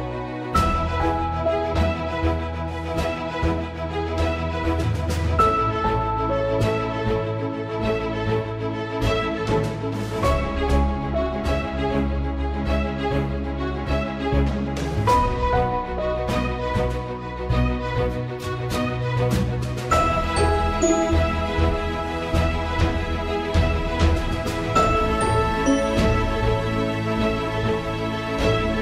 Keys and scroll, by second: 9.1 ctrl+z, 9.5 Up, 10.0 Return.